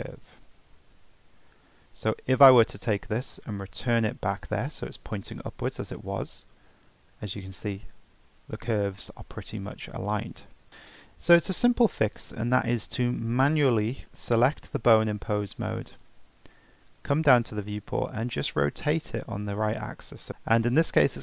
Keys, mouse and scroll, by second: 0.6 Tab, 1.2 scroll down 3, 1.4-2.6 scroll up 3, 2.6 g, 6.3 Tab, 10.5 Tab, 10.5 ctrl+z, 10.7 Tab, 11.0-14.0 shift+middle drag, 14.0-15.2 scroll up 1, 15.2 ctrl+Tab, 15.9 click, 17.1-20.3 scroll down 9, 20.3 ctrl+z.